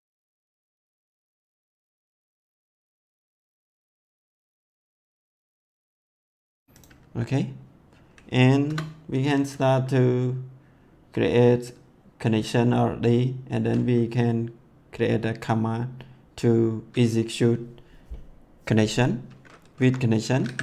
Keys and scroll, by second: 0.2 ctrl+x, 0.8 ctrl+v, 1.7 ctrl+x, 2.8 ctrl+s, 5.7 ctrl+x, 5.9 ctrl+s, 8.6 Return, 19.7 Up, 20.4 c.